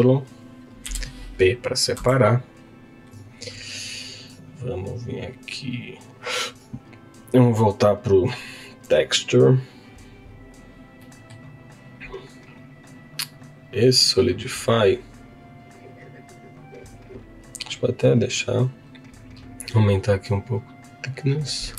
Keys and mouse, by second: 0.8 p, 2.0 Tab, 2.6 click, 4.2 click, 7.3 click, 9.3-10.7 drag, 11.0 middle click, 13.3 click, 18.1-21.6 drag.